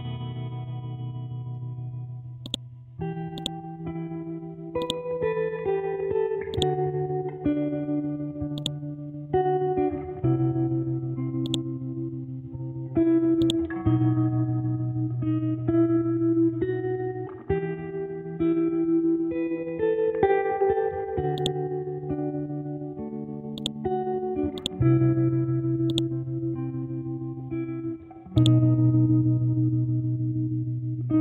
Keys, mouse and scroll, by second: 1.1 Up, 2.0-2.4 scroll down 1, 2.4 click, 4.2-4.8 scroll up 1, 4.8-6.5 drag, 7.7-8.6 typing, 8.6 click, 9.0-10.1 scroll down 1, 11.5-14.7 drag, 14.7 scroll up 1, 15.3 Down, 18.3-18.7 scroll down 1, 21.4-23.0 drag, 23.0 ctrl+z, 23.6-27.1 drag, 27.1-28.3 scroll up 1, 28.3 click, 28.9 ctrl+z, 30.5 ctrl+u.